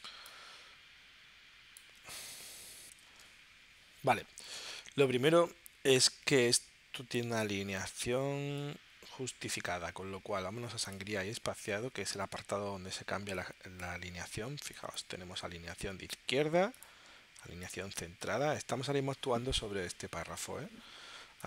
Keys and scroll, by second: 2.9 shift+super+p.